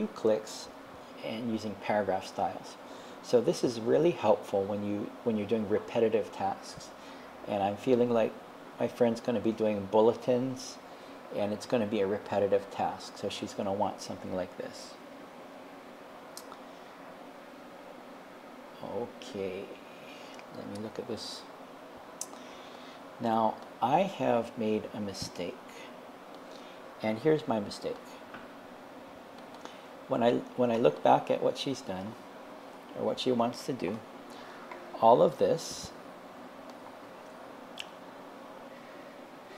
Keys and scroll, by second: 32.7 Left.